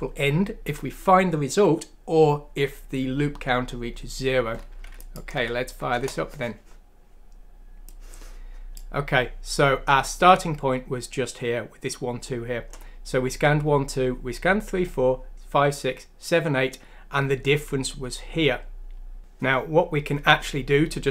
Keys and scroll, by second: 5.3 F6, 5.9 Return.